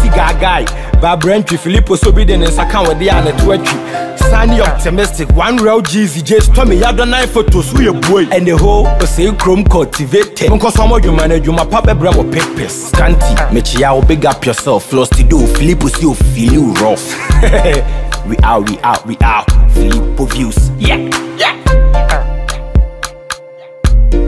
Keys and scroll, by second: 20.0 ctrl+=.